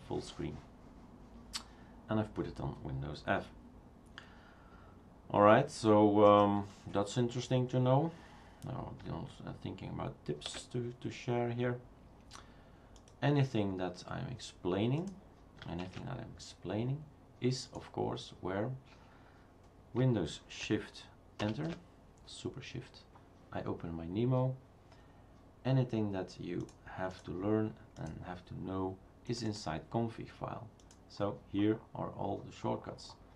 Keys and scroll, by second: 10.5 shift+super+q, 15.9 shift+super+q, 21.4 shift+super+Return.